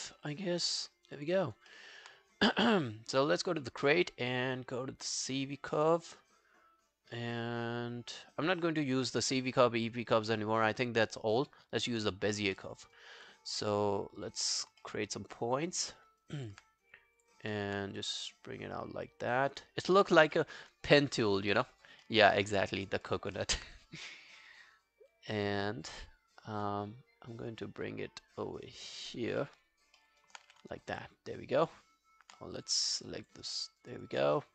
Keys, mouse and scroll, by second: 0.8 alt+middle click, 1.0 alt+right click, 1.2 alt+click, 1.5 alt+right click, 1.7 alt+middle click, 12.1 alt+middle click, 12.3 alt+right click, 12.6 alt+middle click, 12.8 alt+right click, 14.8 alt+middle click, 15.1 alt+right click, 15.4 alt+click, 15.9 alt+middle click, 16.1 alt+right click, 16.4 alt+click, 17.6 alt+middle click, 20.4 alt+middle click, 20.7 alt+scroll down 2, 20.9 alt+click, 21.3 alt+middle click, 21.5 alt+right click, 21.7 alt+click, 22.1 alt+middle click, 22.3 alt+right click, 22.6 alt+middle click, 23.1 alt+click, 23.4 alt+middle click, 29.4 alt+middle click, 29.8 alt+scroll down 1, 30.0 alt+middle click, 30.2 alt+right click, 30.5 w, 30.8 alt+scroll down 1, 31.0 alt+click, 33.0 double click, 33.2 double click, 33.5 alt+middle click, 33.7 alt+right click, 33.9 alt+click, 34.2 alt+right click.